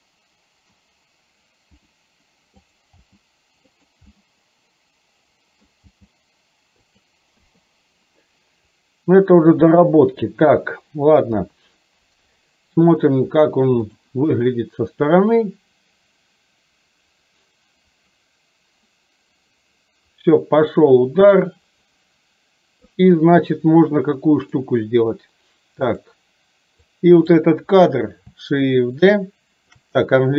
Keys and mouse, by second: 1.9 r, 3.1 g, 4.2-5.7 middle drag, 5.9 g, 7.4 i, 8.8-9.9 drag, 11.4 KP_3, 13.9 click, 15.6-22.9 drag, 24.6 click, 26.0 click, 26.9 click.